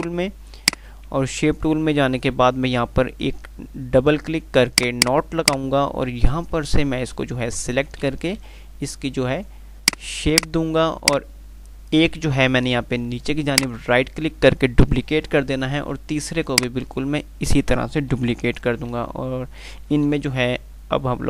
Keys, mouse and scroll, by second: 0.1 click, 1.8 q, 4.9 click, 6.5 Left, 10.1-14.2 drag, 13.8-15.7 right drag, 15.7 r, 16.7-17.5 drag, 18.3 g, 20.4 Page_Up.